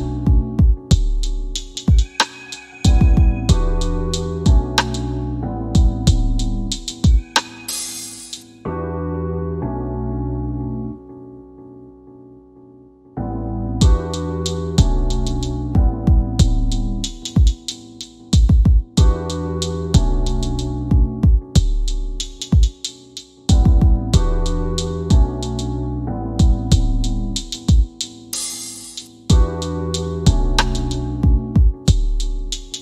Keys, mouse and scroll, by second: 2.9 scroll up 1, 9.8 scroll down 1, 12.5-12.9 scroll up 1, 14.5 click, 17.2 scroll down 1, 17.9 alt+middle click, 19.2 alt+middle click, 20.3 scroll down 1, 20.9 click, 21.1 right click, 22.2 click, 22.8 scroll up 1, 23.5 click, 24.2 middle click, 24.9 scroll up 1, 26.4 m, 27.7 click, 30.6-32.8 typing.